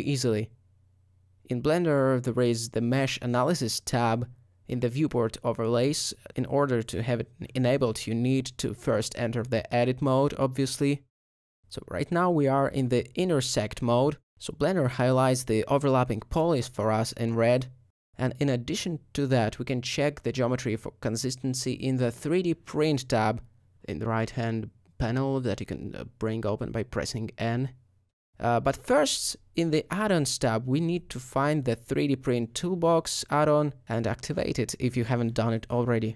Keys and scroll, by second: 3.0 alt+a, 13.1 3, 13.7 g, 30.1 typing.